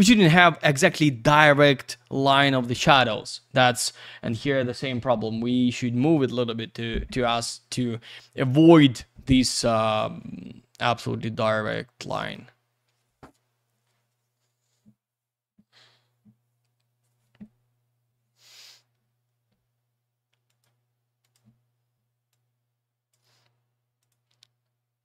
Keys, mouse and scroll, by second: 3.9-5.2 scroll up 1, 12.0 click, 14.3-15.6 scroll down 1, 20.5 click, 21.2 click, 22.3 click, 24.0 click.